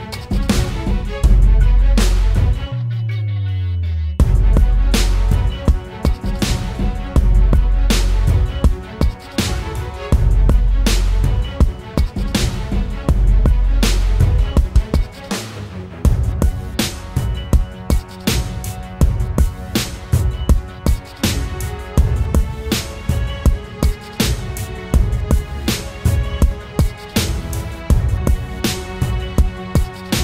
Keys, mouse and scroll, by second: 18.3 alt+click.